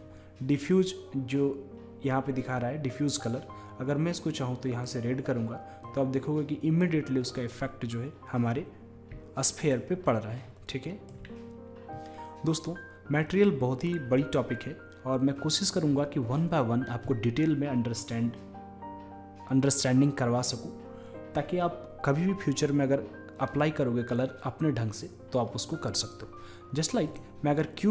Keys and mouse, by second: 3.2-5.1 drag, 9.4-12.5 drag, 27.1-27.9 drag.